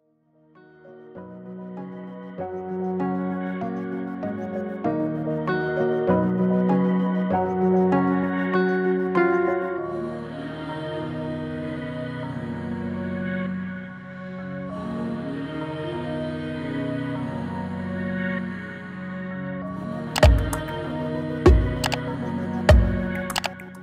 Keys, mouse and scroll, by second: 0.1-5.9 typing, 6.0 Return, 9.5 Return, 10.0 click, 17.0 click, 18.3 click, 20.3-20.9 drag.